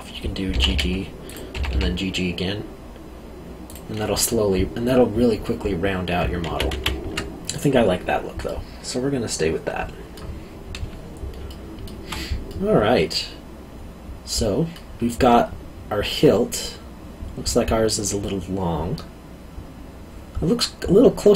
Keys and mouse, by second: 0.5 g, 1.2 click, 1.5 g, 3.6 click, 6.4 ctrl+z, 8.4 middle click, 11.5 alt+middle click.